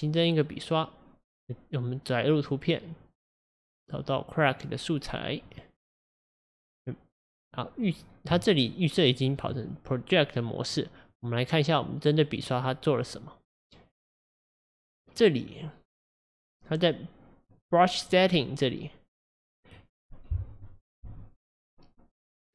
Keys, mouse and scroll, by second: 8.5-11.4 shift+right drag, 12.4 click, 14.3-17.4 drag, 17.5-20.5 drag, 21.0 n.